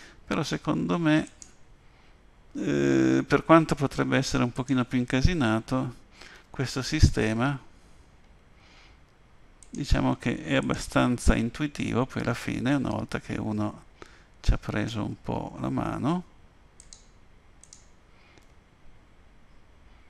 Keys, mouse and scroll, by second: 4.5 click, 6.3 g, 10.6 click, 11.4 g, 17.6 click, 18.4 g.